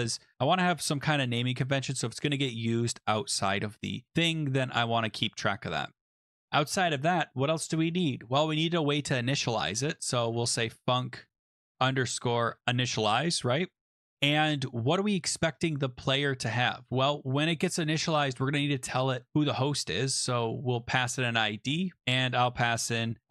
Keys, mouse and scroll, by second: 0.0-0.9 typing, 0.2 Down, 1.3 Down, 1.8 Return, 9.3 Return, 9.4-13.0 typing, 14.1 Left, 14.4 Left, 14.9 Right, 15.0 Right, 15.4 Return, 17.3 shift+Right, 17.5 shift+Right, 18.0 shift+Right, 18.0 Up, 18.6 Right, 20.5-21.4 typing, 21.5 Left, 22.6 Down, 22.8-23.3 typing.